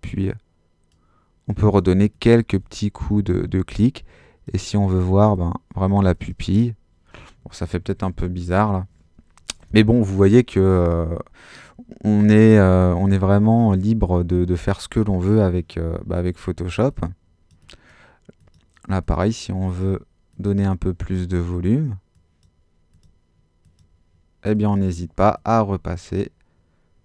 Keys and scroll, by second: 7.7 alt+super+z.